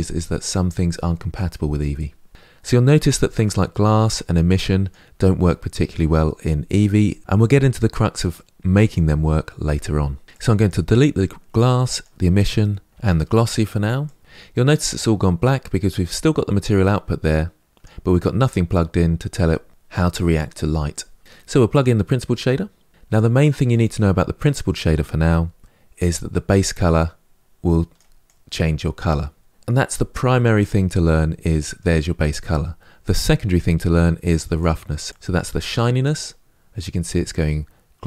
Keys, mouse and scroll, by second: 2.3 n, 3.2 click, 4.0 click, 10.2 click, 10.8 Delete, 11.8 click, 12.0 Delete, 13.8 click, 15.9 click, 21.5 drag, 27.3 click, 34.5-36.4 drag, 36.4-38.0 middle drag.